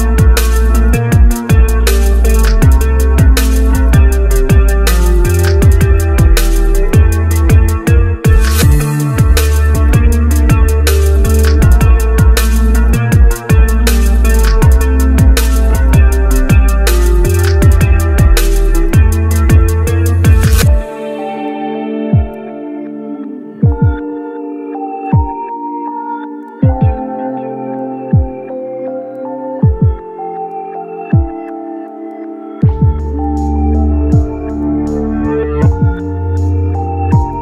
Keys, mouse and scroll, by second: 17.0 ctrl+c, 17.4 ctrl+v, 31.9 ctrl+v.